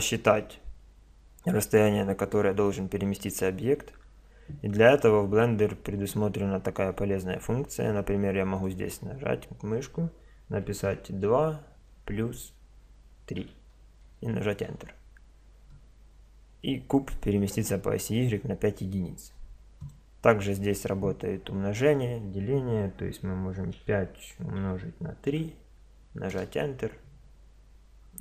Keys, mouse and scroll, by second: 8.6-10.3 drag, 16.6-18.6 middle drag, 19.8-21.6 drag, 27.6-28.2 middle drag.